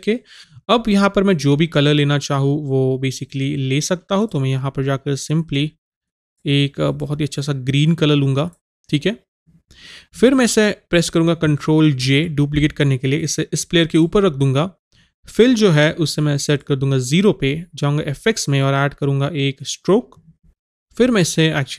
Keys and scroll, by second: 12.0 ctrl+j.